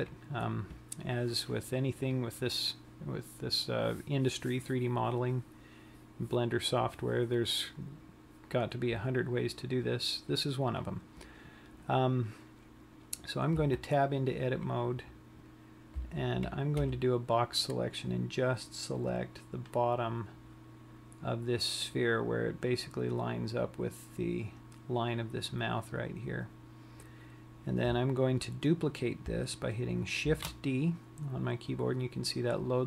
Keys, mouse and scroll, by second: 14.2 Tab, 16.5 a, 17.5 b, 30.8 shift+d.